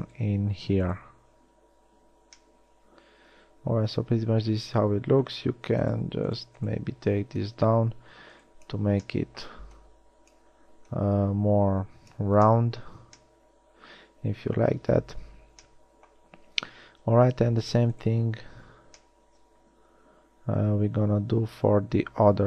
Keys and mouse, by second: 1.4 f, 2.1 a, 13.1 a, 21.3-22.4 middle drag.